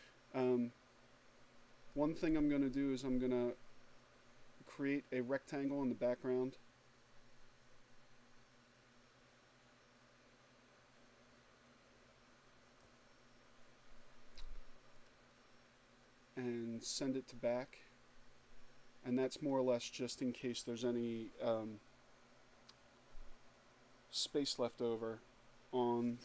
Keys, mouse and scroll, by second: 2.8-10.9 drag, 12.7 click, 14.7 click, 17.1 click.